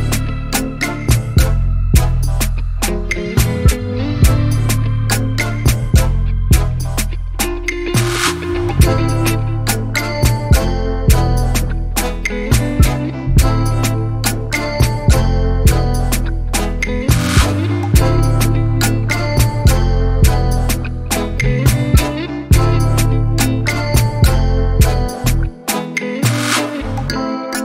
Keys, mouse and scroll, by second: 0.2-3.3 middle drag, 4.0-5.2 drag, 5.2-7.1 middle drag, 7.1-8.7 drag, 8.7-9.1 middle drag, 9.1 click, 9.3 scroll down 5, 9.6 middle click, 10.0-10.3 scroll up 2, 10.3-10.8 middle drag, 10.8-11.2 scroll up 3, 11.2-13.0 middle drag, 13.0 click, 13.9-16.2 middle drag, 16.2 click, 16.7 scroll down 1, 16.9 middle click, 17.5 scroll down 3, 17.7-19.0 middle drag, 19.0 click, 19.8 shift+middle click, 20.6 KP_1, 21.1 click, 21.6 click, 21.9 scroll up 2, 22.0 g, 23.3 shift+scroll down 1, 23.5 shift+middle click, 23.8 g.